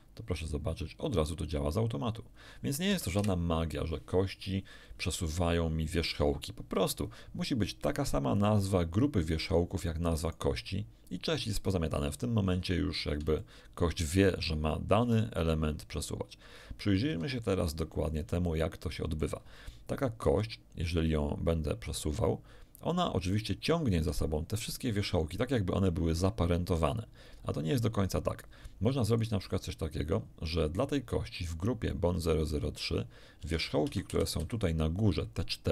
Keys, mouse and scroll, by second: 2.8 Escape, 3.1 KP_1, 8.3 right click, 10.2 right click, 13.3 shift+middle click, 14.9 r, 17.0 Escape, 17.3-17.9 scroll up 1, 18.0 scroll up 1, 18.4 shift+middle click, 20.2 r, 24.0 Escape, 29.1 click, 33.3 Tab, 33.8 a, 34.1 z, 34.4 b, 34.6 click, 35.3-35.7 drag.